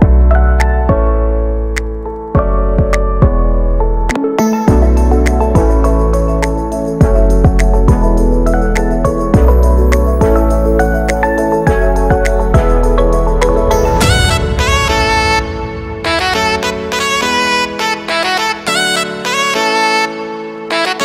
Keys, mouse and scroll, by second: 0.3 click, 2.1 ctrl+space, 3.1-4.9 drag, 4.9 KP_1, 7.7 ctrl+space, 8.1 shift+middle click, 8.6-10.3 alt+right drag, 10.3-10.8 scroll up 1, 10.8 middle click, 11.4 KP_1, 12.2-14.2 alt+right drag, 14.2 click, 14.8 x, 14.8-17.4 drag, 17.4 scroll down 2, 17.6-19.4 middle drag, 19.4 click, 19.6 scroll down 1, 19.7-20.9 shift+middle drag, 20.9 scroll up 1.